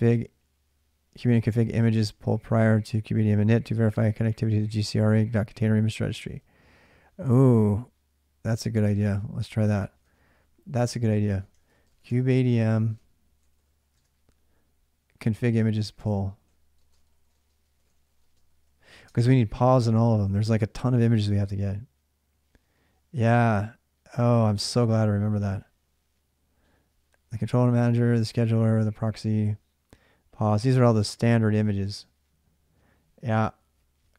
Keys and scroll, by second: 9.8 alt+Tab, 11.0-13.9 typing, 15.8 alt+Tab, 16.4-19.1 typing.